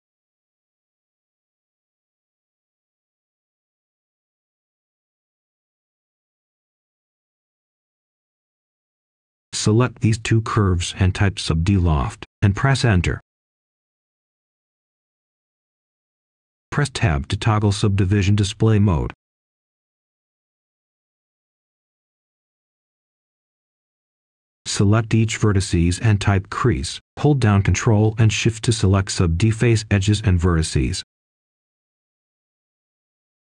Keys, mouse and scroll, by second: 4.5-6.2 scroll down 1, 6.2-7.0 scroll up 1, 7.0 click, 8.3 shift+click, 11.2 s, 13.9 Return, 16.1 right click, 18.5 click, 20.5 Tab, 24.6-30.9 ctrl+shift+drag, 33.0 typing.